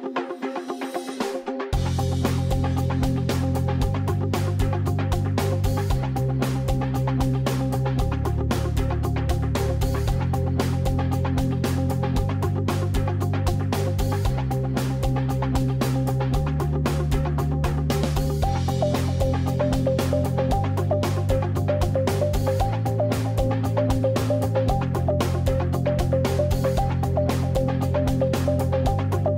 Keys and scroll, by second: 1.6 alt+space, 17.0 alt+space, 20.1 alt+space, 20.7 alt+space, 24.9 alt+space, 27.2 super+space.